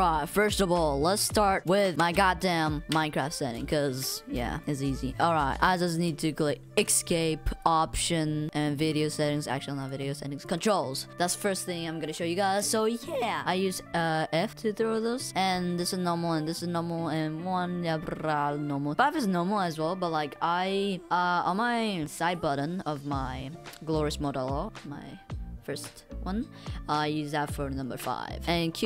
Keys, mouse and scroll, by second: 0.0-0.5 typing, 1.6 w.